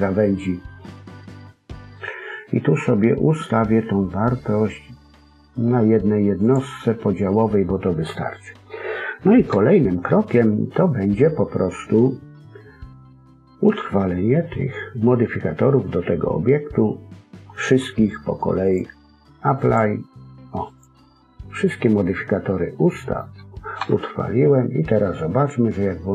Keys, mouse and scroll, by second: 6.3 click, 8.0 middle click, 8.9-9.4 scroll up 1, 11.0 KP_1, 17.6 click, 18.6 click, 20.6 click, 22.0 middle click, 23.7 KP_1.